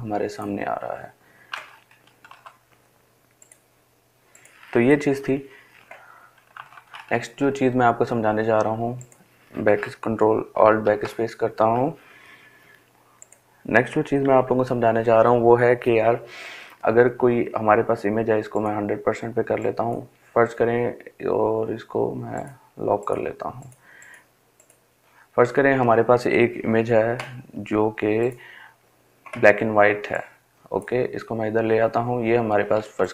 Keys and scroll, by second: 2.6 Delete, 4.4 ctrl+alt+z, 11.7 Delete.